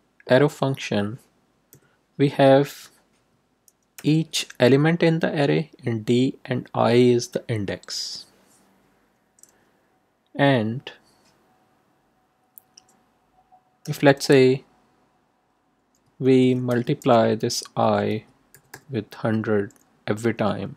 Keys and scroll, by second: 1.7 =, 13.8 i, 16.6 shift+8, 18.1 1, 18.5 0.